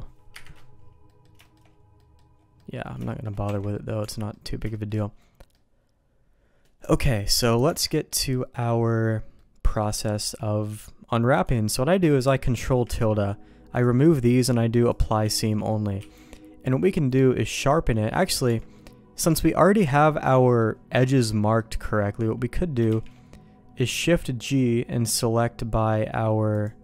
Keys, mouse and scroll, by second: 0.3 KP_Divide, 1.0 middle click, 1.4 shift+middle click, 1.9 middle click, 2.5 middle click, 3.0 middle click, 3.4 Tab, 3.7 middle click, 3.9 Tab, 4.2 middle click, 4.6 shift+middle click, 5.5-6.6 middle drag, 6.7 Tab, 7.6 Tab, 8.0 middle click, 9.3 middle click, 12.5 ctrl+`, 15.5 middle click, 15.9 q, 18.4 Tab, 18.7 middle click, 20.1 middle click, 21.5 middle click, 22.8 shift+g.